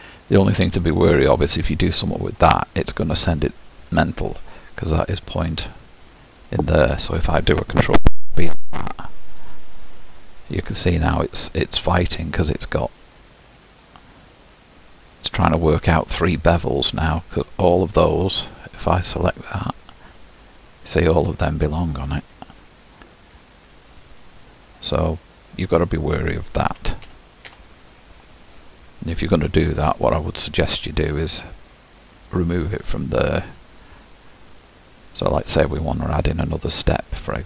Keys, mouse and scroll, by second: 1.5 click, 2.1-2.9 scroll up 1, 2.9-5.5 scroll up 1, 5.5 scroll up 2, 5.5 click, 8.3 ctrl+shift+b, 20.1-23.4 drag, 26.7 ctrl+z, 27.1 ctrl+z, 34.8-37.4 middle drag.